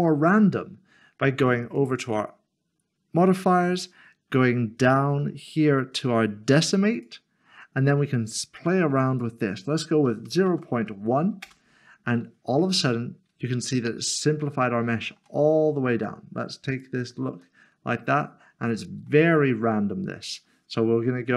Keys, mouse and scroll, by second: 1.7 Tab, 6.9 click, 9.1 click, 10.3-10.8 typing, 11.4 Return, 12.8 middle click, 16.7 click, 17.6 middle click, 20.2 click.